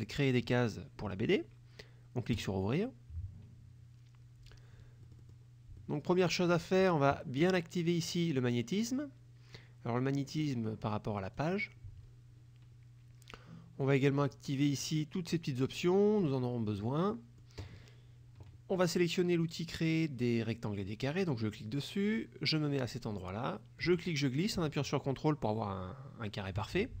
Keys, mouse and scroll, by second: 0.0 click, 2.4 click, 5.2 middle click, 5.8 middle click, 7.6 click, 8.1 click, 11.4 click, 14.3 click, 14.9 click, 15.4 click, 15.9 click, 16.3 click, 17.2 middle click, 21.1 click, 23.9-26.8 drag.